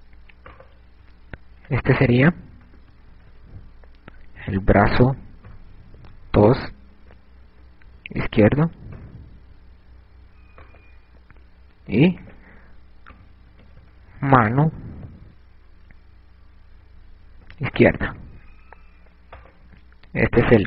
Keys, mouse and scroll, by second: 1.1 right click, 2.6 click, 11.3 right click, 12.6 click, 20.1 right click.